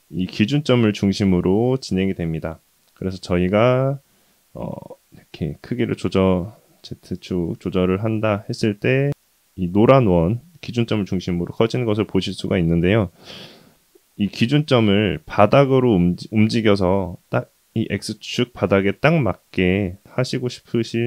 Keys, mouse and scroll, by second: 0.5-1.0 middle drag, 2.9 KP_1, 5.1 s, 17.6-17.9 scroll down 1, 17.9 scroll up 2, 18.3 shift+middle drag, 18.8-20.2 scroll up 1, 20.2 g.